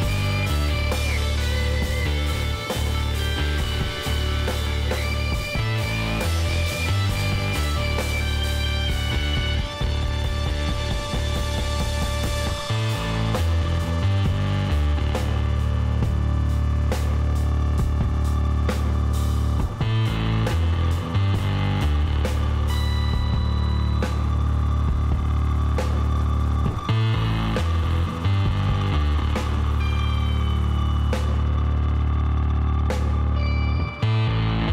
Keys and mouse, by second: 3.0-7.6 drag, 7.6-9.1 middle drag, 9.8 s, 13.3 s, 16.1-17.9 middle drag, 16.9 Tab, 18.1 Tab, 23.0-24.4 middle drag, 24.4 s, 28.2 middle click, 28.3 Tab, 29.7 a, 30.1 middle click, 31.1 Tab, 34.6-34.7 middle drag.